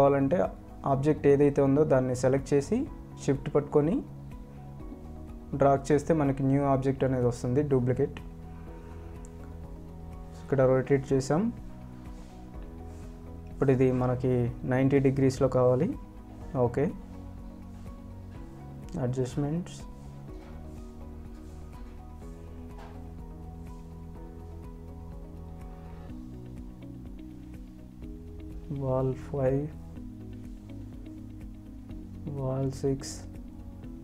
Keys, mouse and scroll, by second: 11.1 click, 17.0 click, 19.7 ctrl+alt+click, 20.9-21.5 scroll down 1, 22.1 scroll up 1, 22.4 ctrl+alt+click, 26.3 scroll down 1, 26.4 click, 26.8 shift+click, 31.2 Escape, 31.5 shift+click.